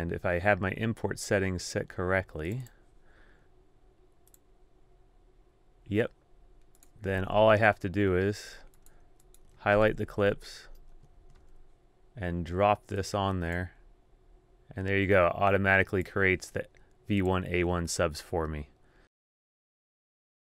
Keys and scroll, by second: 7.3 super+Tab, 10.2 super+a, 11.0 super+Tab, 11.4 shift+super+d.